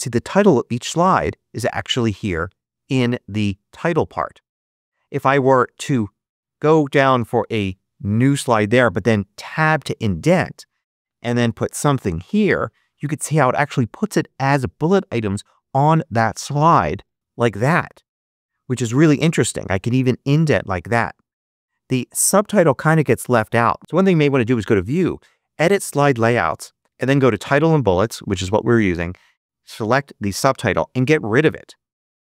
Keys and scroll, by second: 7.1 Return, 9.4 Tab, 11.1-12.8 typing, 16.4 Return, 16.9 shift+Return, 17.1 shift+s, 18.9 Tab, 30.6 BackSpace.